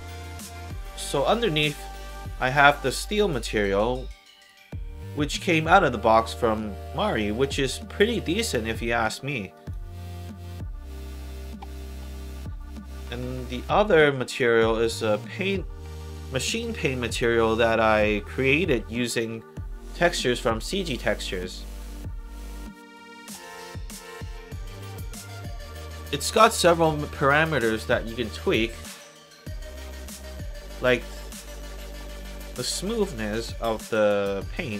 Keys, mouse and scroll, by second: 0.5 click, 3.1 alt+click, 4.2 alt+click, 4.6 alt+middle click, 5.0 alt+click, 5.8 alt+middle click, 6.2 alt+click, 6.9 alt+right click, 7.2 alt+click, 8.0 click, 9.2 alt+middle click, 9.5 alt+right click, 9.8-11.1 alt+drag, 12.6 click, 13.6 1, 14.9 click, 19.9 alt+right click, 20.7-21.7 alt+drag, 21.8 alt+right click, 22.6 alt+click, 28.5-30.7 drag, 32.1 alt+middle click, 32.4 alt+right click, 34.1-34.7 alt+drag.